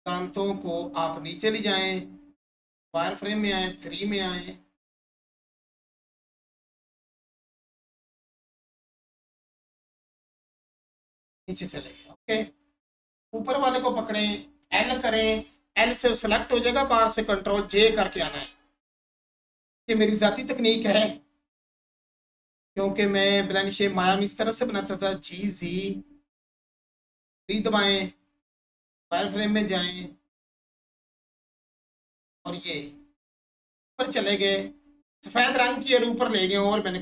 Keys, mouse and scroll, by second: 1.0 click, 3.3 3, 5.1 click, 7.9 click, 8.4 1, 10.5 click, 13.1 click, 17.6 click, 19.6-20.0 scroll down 1, 26.9 click, 27.2 3, 28.8 click, 31.3 click, 32.9 1, 36.8 click.